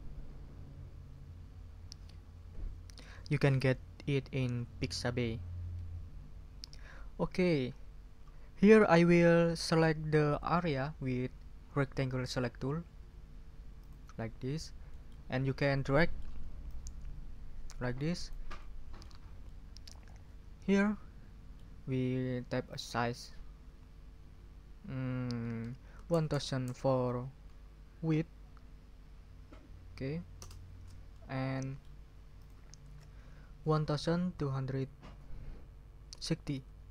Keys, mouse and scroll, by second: 13.8 click, 14.9 ctrl+middle click, 15.4 ctrl+scroll up 2, 15.9 ctrl+middle click, 16.6-17.7 middle drag, 17.7 click, 18.3-19.9 scroll up 4, 19.6 click, 19.9-21.8 drag, 22.7 ctrl+click, 23.6 ctrl+a, 25.7-26.6 typing, 30.4 Return, 31.1-32.0 scroll up 3, 32.3 ctrl+click, 32.8 ctrl+a, 33.7 1, 34.4 2, 36.5 5.